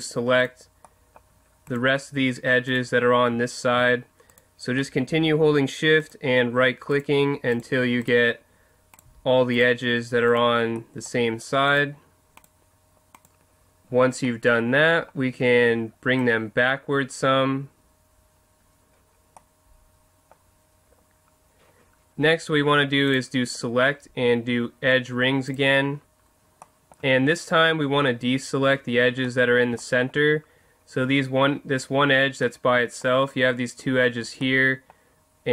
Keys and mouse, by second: 13.8-16.2 middle drag, 16.2-18.1 drag, 18.8 click, 19.4 middle click.